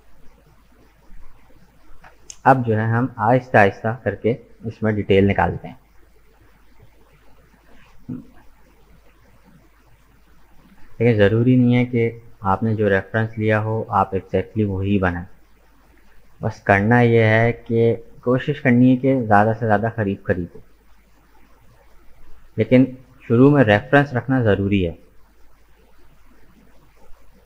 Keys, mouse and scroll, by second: 2.2-2.6 scroll up 2, 2.6-5.8 middle drag, 8.3 KP_1, 9.3-9.9 scroll up 1, 9.9 shift+middle click, 10.5-11.0 scroll up 3, 11.0-14.2 shift+middle drag, 14.2 right click, 15.0 Tab, 18.2 ctrl+r, 22.0-24.3 middle drag, 24.3 ctrl+r, 26.7-27.4 middle drag.